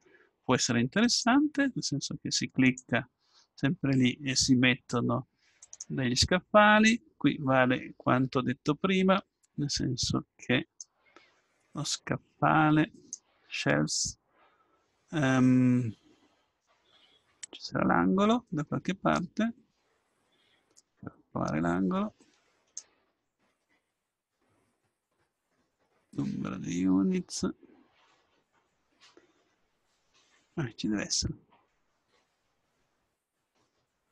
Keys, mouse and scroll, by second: 1.0-2.6 right drag, 3.0-7.5 drag, 10.8 click, 11.6-13.8 middle drag, 16.7 middle click, 21.3-22.9 drag, 23.4-24.9 middle drag, 23.4-24.9 scroll down 1, 32.1-34.1 middle drag.